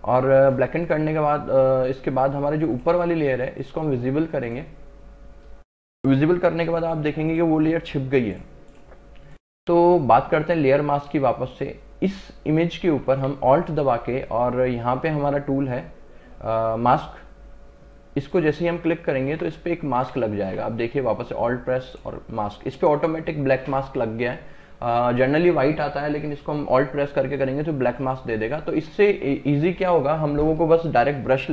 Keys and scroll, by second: 20.0 ctrl+z.